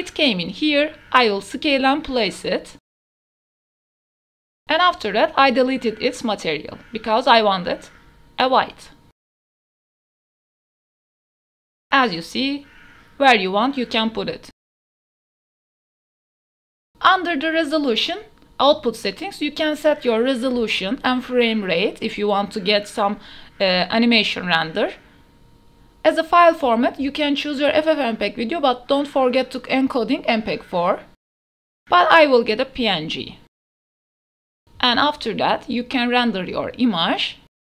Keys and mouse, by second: 1.4 KP_0, 2.2 g, 2.4 x, 6.2 s, 6.8 click, 8.7 r, 9.2 Tab, 9.2 u, 9.2 a, 9.9 ctrl+s, 14.6 a, 15.6 ctrl+s, 15.8 click, 17.7 click, 25.3-26.7 drag, 27.7 click, 28.5 click, 29.0-29.8 drag, 31.2-32.4 drag, 34.6 ctrl+s, 35.3-37.7 drag.